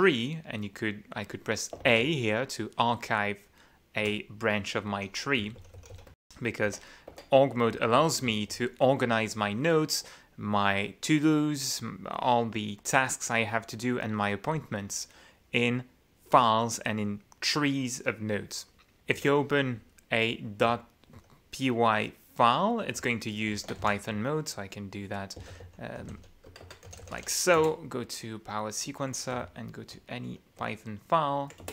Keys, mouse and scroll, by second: 1.8 shift+a, 4.0 u, 5.4 j, 5.8 k, 6.1 Tab, 8.3 k, 19.1 -, 19.7 j, 20.7 k, 21.2 j, 23.0 q, 23.6 ctrl+w, 23.8 ctrl+v, 25.4-27.7 typing, 29.4 Down, 30.6 Up, 31.6 Return.